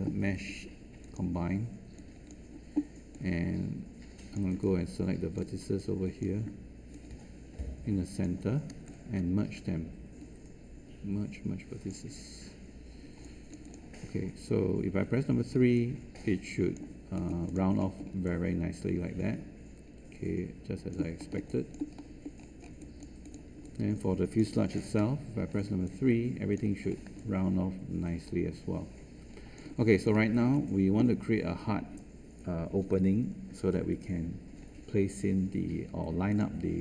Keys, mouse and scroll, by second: 15.0 3, 25.3 3.